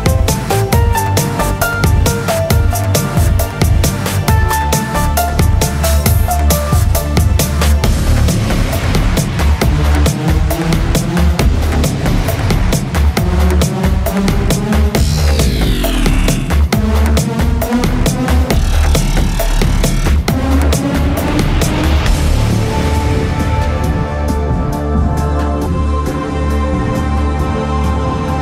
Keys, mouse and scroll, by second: 1.6 p, 4.1 Tab, 4.7-7.7 middle drag, 6.1 x, 7.7 Tab, 8.5 a, 10.4 s, 14.5 Tab, 14.9 middle click, 15.7 middle click, 16.4 Tab, 18.1 KP_7, 19.9 Tab, 21.7 Tab, 23.3 a, 24.7 a, 24.7 e.